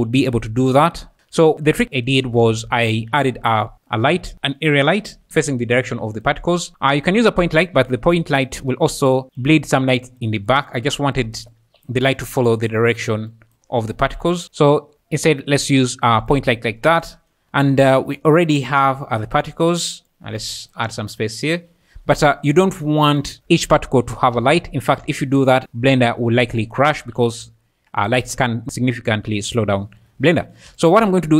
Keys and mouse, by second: 1.5 `, 2.4 alt+a, 3.0 alt+a, 4.3-5.6 typing, 5.3 KP_Subtract, 6.2 click, 13.3 click, 20.6 click, 23.0 ctrl+s, 23.2 click, 23.4 `, 24.4 alt+a, 24.7 `, 27.2 `, 30.7 shift+a.